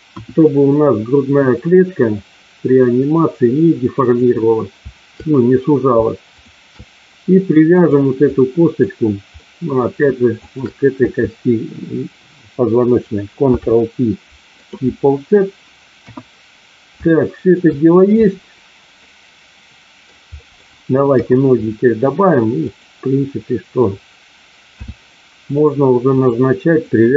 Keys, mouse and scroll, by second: 0.0 KP_1, 1.5-4.2 drag, 8.3 click, 9.3 middle click, 10.3 shift+click, 13.4 ctrl+p, 16.0 KP_1, 17.0 shift+middle click, 18.9-20.0 middle drag, 20.4 middle click, 21.0 KP_1, 24.7 e, 26.0 click, 26.7 click.